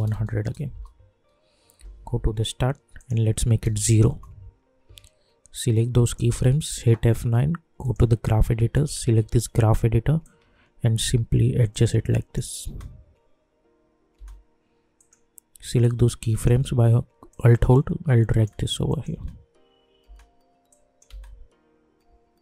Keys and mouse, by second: 0.7 Return, 1.7 j, 2.0 j, 2.9 click, 4.1 Return, 5.5 click, 6.8 F9, 7.8-11.7 drag, 11.7 click, 12.6 space, 14.9-17.3 drag, 17.3-18.8 alt+drag, 19.1 space, 20.6 click, 21.0 space.